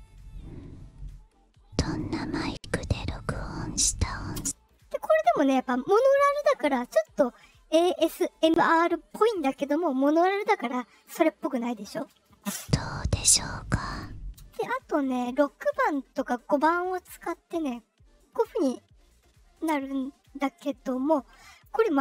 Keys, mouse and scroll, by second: 4.3 space, 12.4 space, 14.3 space, 17.3-21.6 drag.